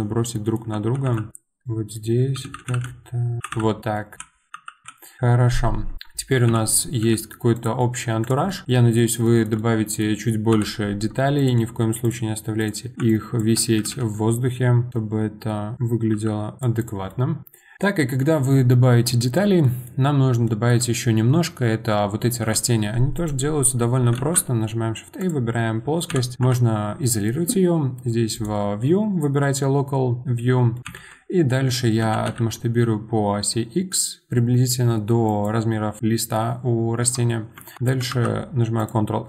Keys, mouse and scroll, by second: 0.3-1.0 shift+middle drag, 1.6 middle click, 2.6-4.8 typing, 4.0 middle click, 4.5 click, 5.8 scroll down 1, 5.9 middle click, 6.5 KP_7, 7.0 g, 7.8-8.2 middle drag, 8.2 click, 8.5 middle click, 8.6 scroll up 2, 8.7-10.5 middle drag, 10.5 KP_1, 11.4 click, 12.0 shift+click, 12.6 shift+click, 13.1 ctrl+click, 13.8 g, 14.9 click, 16.6 r, 16.8 click, 17.1-20.2 middle drag, 20.2 scroll down 1, 20.4-22.4 middle drag, 22.4 KP_7, 23.1 click, 24.1 shift+a, 26.4 KP_Divide, 28.3-30.7 drag, 30.7 middle click, 30.8 scroll down 1, 30.8 KP_7, 31.5-32.0 scroll down 1, 32.0 s, 37.5 Tab, 38.1 ctrl+r.